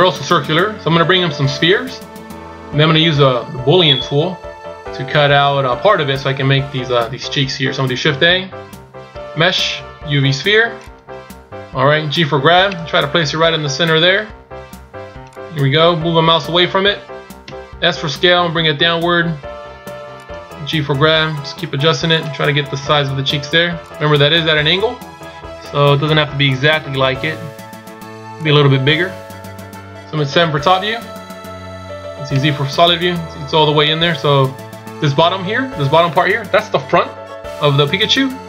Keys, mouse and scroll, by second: 22.9 s, 30.6 KP_7, 32.4 z.